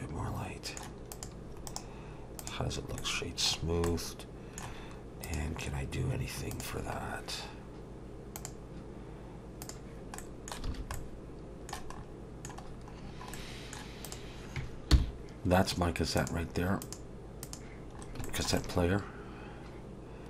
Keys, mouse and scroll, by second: 1.1 click, 1.7 right click, 2.7 scroll down 2, 3.0 middle click, 3.6-4.0 scroll down 2, 3.9 middle click, 5.2 click, 7.0-8.3 scroll down 2, 8.4 click, 9.6 click, 10.2 middle click, 10.7 alt+a, 10.9 middle click, 12.0-12.7 scroll up 4, 12.3 middle click, 12.7-13.7 scroll down 5, 13.3 middle click, 14.1 click, 14.9 h, 16.2 click, 16.8 click, 18.0 scroll up 2, 18.3 shift+middle click, 18.6 middle click.